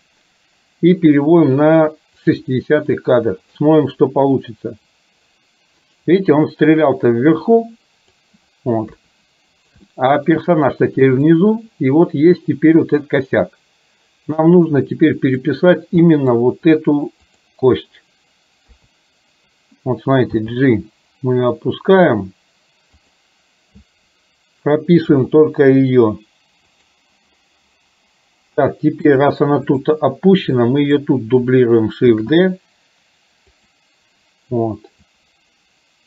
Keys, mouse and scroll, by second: 3.6 click, 4.0-8.3 drag, 8.9 KP_3, 10.0-10.4 shift+middle drag, 11.4-15.6 drag, 16.1 middle drag, 17.4 click, 18.8 KP_3, 20.5 g, 26.8 click, 29.1 click, 29.8 click, 30.6 click, 32.1 shift+d, 35.3-36.0 drag.